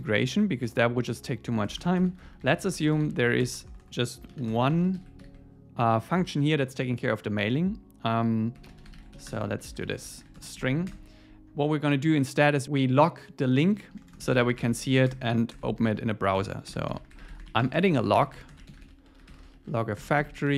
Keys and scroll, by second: 1.6 Return, 10.6 alt+8, 10.9 Return, 20.0 Return.